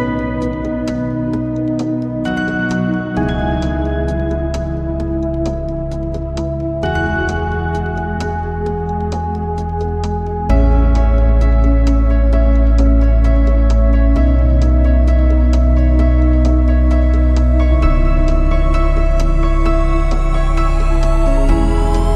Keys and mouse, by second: 1.7 click, 3.1 click, 4.0 click, 4.4 click, 5.3 click, 8.4 middle click, 9.5 click, 11.3-13.3 middle drag, 14.2 shift+middle click, 16.9-18.8 shift+middle drag, 19.4 click.